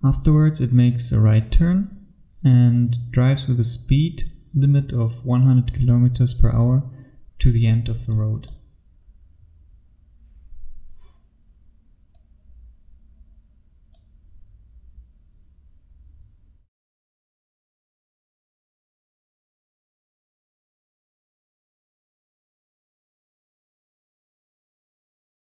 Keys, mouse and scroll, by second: 8.1 click, 8.7-12.1 scroll down 1, 12.2 click.